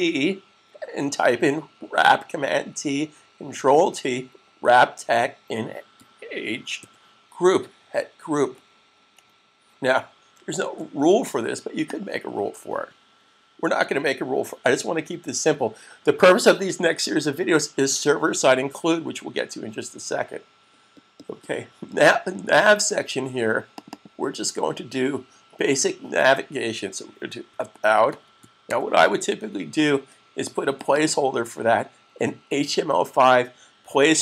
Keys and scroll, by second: 5.8 typing, 6.8 typing, 10.7 s, 27.2-29.1 typing.